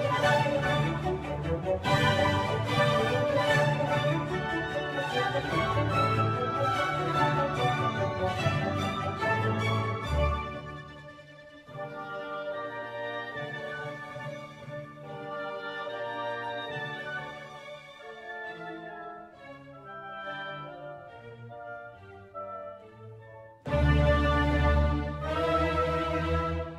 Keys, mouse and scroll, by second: 4.7 click, 9.1 click, 18.5 g, 22.3 r.